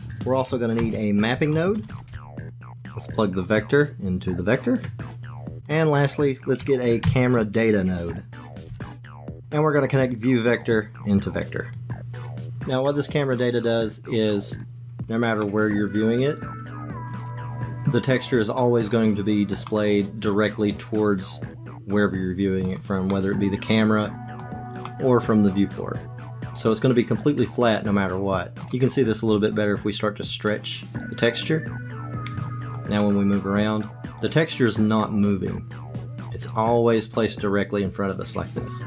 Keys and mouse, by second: 0.8 shift+a, 1.9 p, 3.5-4.9 drag, 5.7 click, 7.0 shift+a, 10.6-11.8 drag, 13.1 click, 15.4-17.1 middle drag, 19.7-22.7 middle drag, 23.1-24.4 middle drag, 24.9-28.1 middle drag, 28.5 click, 30.4-32.3 drag, 33.0-38.8 middle drag.